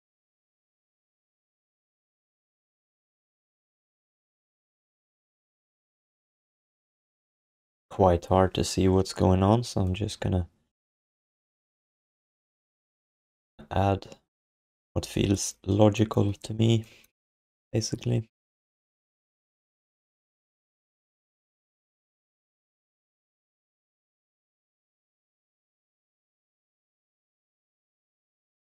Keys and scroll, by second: 26.3 q, 27.7 alt+shift+d, 28.0 ctrl+s.